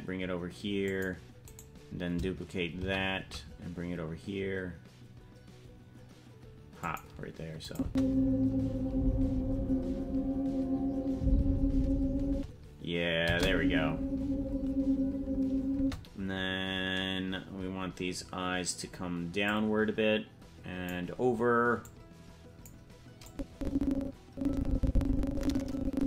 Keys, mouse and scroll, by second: 1.5 right click, 2.8 shift+d, 7.7-11.8 drag, 7.8 space, 12.3 space, 13.3 space, 15.8 space, 19.5-20.9 drag, 21.8 click, 23.3-26.0 drag.